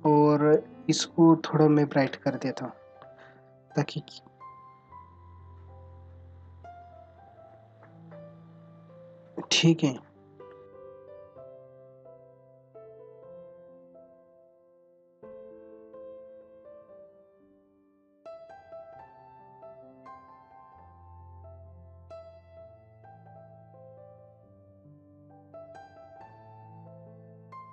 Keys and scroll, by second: 26.9 ctrl+=, 27.1 space.